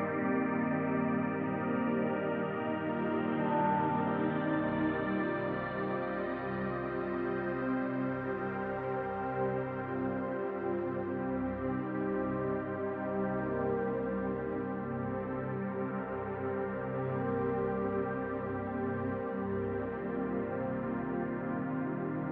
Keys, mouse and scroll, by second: 6.7 middle click, 7.3-8.8 drag, 8.5 scroll down 2, 8.8-10.9 middle drag, 10.3-10.9 scroll up 2, 10.9-18.0 drag, 18.0 middle click, 18.5-20.5 drag, 20.0 scroll down 1, 20.5-22.1 middle drag, 22.1 click.